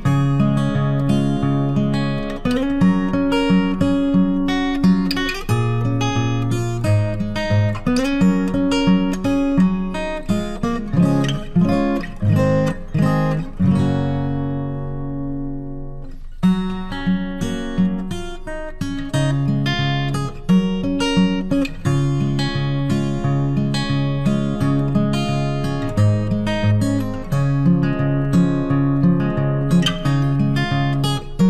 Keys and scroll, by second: 16.4 ctrl+t.